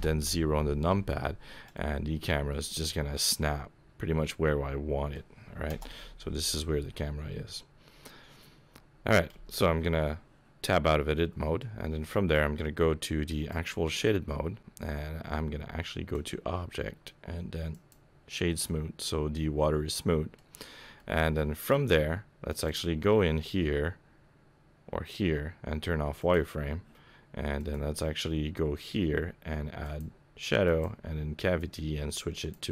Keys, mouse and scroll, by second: 1.7 middle click, 2.5 middle click, 2.7 middle click, 5.7 KP_0, 7.8-8.7 scroll up 3, 9.4 Tab, 11.1 middle click, 11.8-12.3 scroll down 1, 13.5 click, 16.1 click, 18.7 middle click, 20.4-20.9 scroll down 5, 21.0 middle click, 22.5 click, 27.6 click.